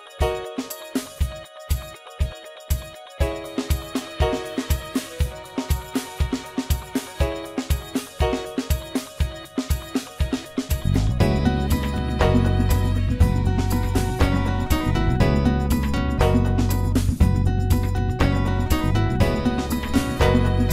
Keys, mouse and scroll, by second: 0.3 s, 2.7 KP_1, 3.5 s, 5.6 KP_7, 6.4 ctrl+a, 8.1 Tab, 8.4-9.1 scroll up 1, 9.1 3, 9.6 click, 10.4 s, 12.1 s, 14.7 KP_3, 15.4-16.0 scroll up 3, 16.0-16.4 scroll down 2, 16.4-17.6 middle drag, 17.6 Tab, 19.0 click.